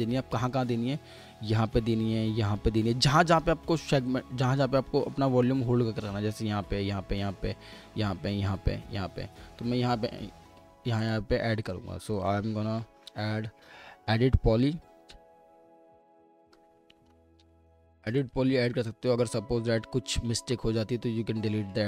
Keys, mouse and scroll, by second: 0.0 middle click, 4.3-6.5 scroll up 1, 12.9 typing, 14.9 typing, 18.3 typing, 20.3 middle click.